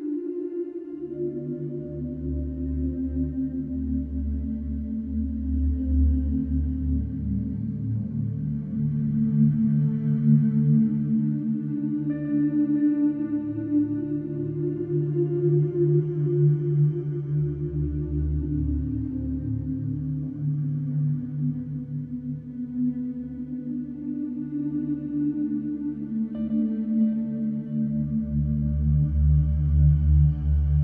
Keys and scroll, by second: 0.4 ], 0.7 ], 1.6 4, 4.1 3, 4.6 ], 5.3 4, 12.3 Return, 16.1 ctrl+d, 16.1 Escape, 16.9 ctrl+d, 17.0 Escape, 17.8 F1, 26.2 2.